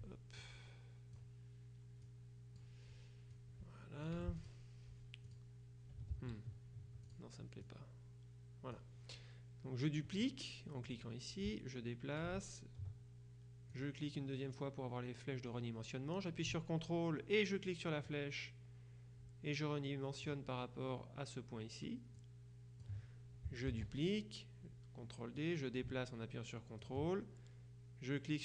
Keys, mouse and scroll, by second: 0.5 click, 2.1 click, 3.4-5.0 drag, 4.3 F1, 5.3 click, 6.2 ctrl+z, 7.1-9.3 drag, 10.9 click, 13.8 click, 18.1-20.8 ctrl+drag, 22.2 click, 23.7 ctrl+d, 25.5-27.4 drag.